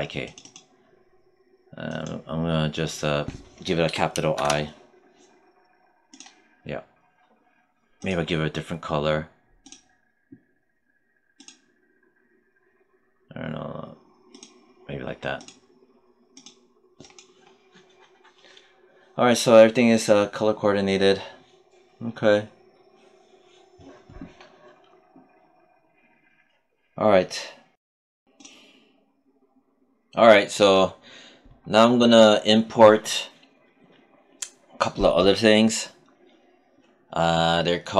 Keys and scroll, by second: 3.7 BackSpace, 4.2 shift+i.